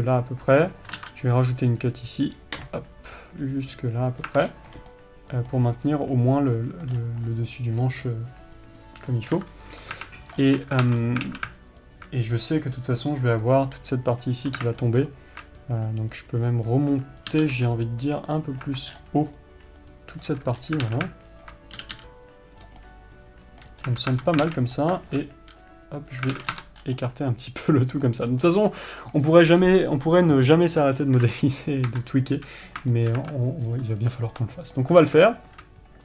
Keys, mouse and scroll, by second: 5.3-15.2 middle drag, 19.7-21.8 middle drag, 23.2-25.2 middle drag, 27.4-36.0 middle drag.